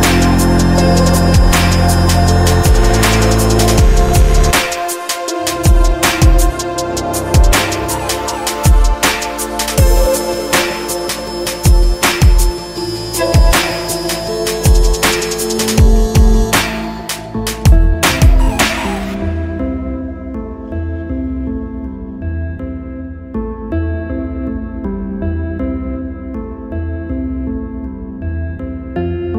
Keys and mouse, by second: 1.6 ctrl+r, 9.6 ctrl+r, 11.0 ctrl+r, 14.7 a, 14.8 a, 15.2 Tab, 16.1 ctrl+z, 16.1 Delete, 16.1 a, 16.3 a, 16.7 Tab, 16.9-18.1 drag, 17.1 Tab, 19.0 s, 23.0-24.6 middle drag, 26.6 click, 28.6 a.